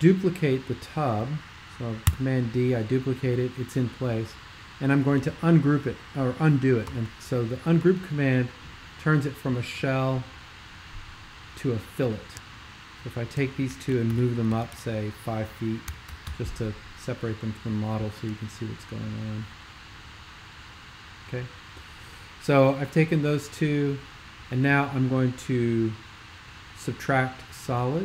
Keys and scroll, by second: 2.1 super+d, 6.9 super+u, 14.2 alt+super+m, 14.5 Tab, 14.7 Tab, 15.6-16.5 typing.